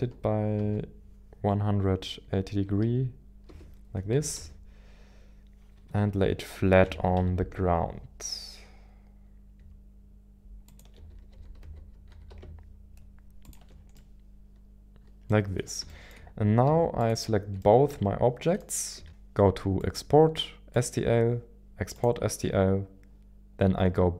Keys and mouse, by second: 0.5 x, 1.6-2.8 typing, 3.4 Return, 4.1 KP_1, 4.3 KP_7, 5.8 KP_1, 6.8 g, 7.2 z, 10.8 ctrl+shift+click, 11.3-12.4 typing, 13.4 ctrl+click, 13.9-15.8 middle drag, 15.9 shift+middle click, 17.1 shift+click, 17.6-18.7 middle drag, 19.1-20.9 drag.